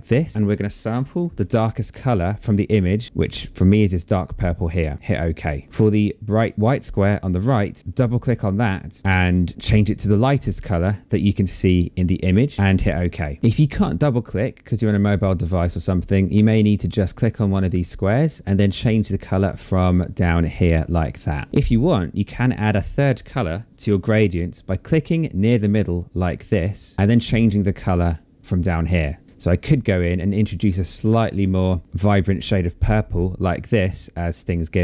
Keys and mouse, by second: 0.3 click, 2.7 click, 5.4 click, 7.8 click, 8.7 click, 10.1 click, 12.8 click, 19.8 click, 24.7 click, 28.2 click, 29.2 click.